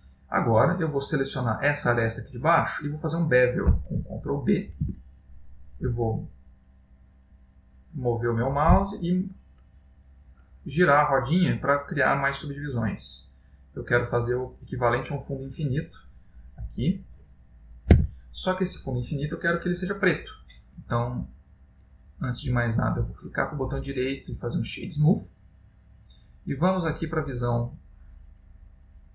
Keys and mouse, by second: 1.8 click, 2.4 middle click, 4.7 ctrl+b, 15.8 middle click, 18.0 Tab, 18.4 middle click, 23.1 right click, 25.2 middle click, 27.4 click.